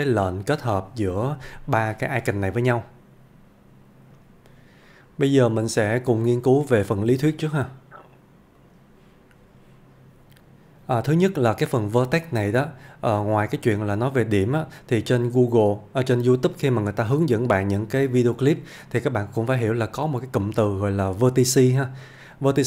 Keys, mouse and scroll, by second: 4.1 F1, 4.9 click, 6.3 scroll down 1, 8.6 click, 11.2-15.0 click, 19.5 click.